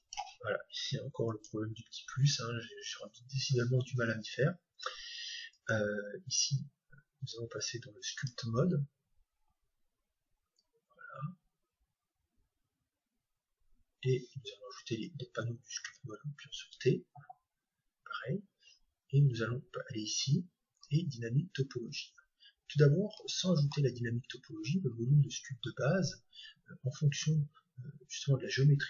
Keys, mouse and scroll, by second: 1.3-3.2 drag, 5.5-7.4 drag, 18.5-20.4 middle drag, 20.4-21.8 scroll up 2, 21.8-22.5 scroll up 1, 22.8-23.7 scroll down 2, 23.7-24.7 scroll up 2, 24.7-25.1 scroll up 1, 25.1 middle click, 25.8-27.0 scroll up 1, 27.0 scroll up 1, 27.2-27.9 scroll down 1, 27.4 Tab, 28.5 Tab.